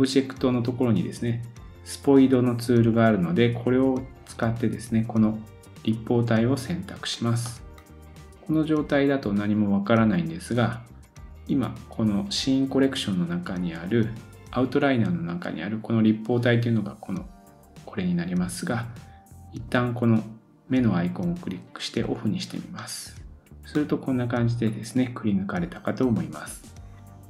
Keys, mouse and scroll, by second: 7.5 middle click, 10.5-27.2 drag, 22.8 middle click, 26.5-27.2 scroll up 1.